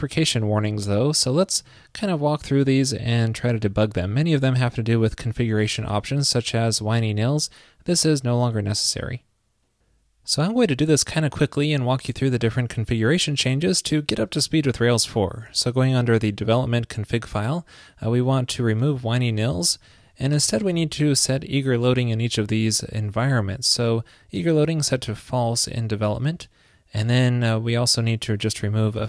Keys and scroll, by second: 20.7 super+v.